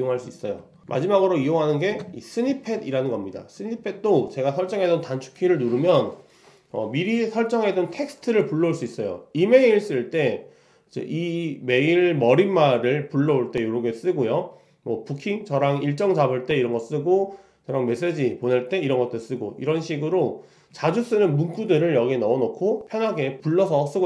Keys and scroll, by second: 0.8 super+t.